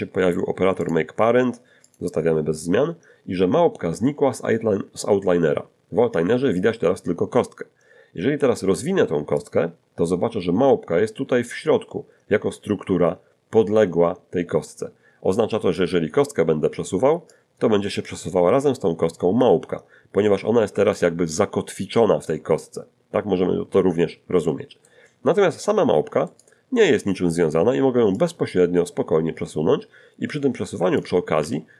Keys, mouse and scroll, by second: 0.8 click, 1.9 click, 9.4 click, 15.6 right click, 17.3-21.1 drag, 20.7 Escape, 22.3-25.0 middle drag, 26.3 right click, 28.2-31.2 drag, 30.8 Escape, 31.4 g.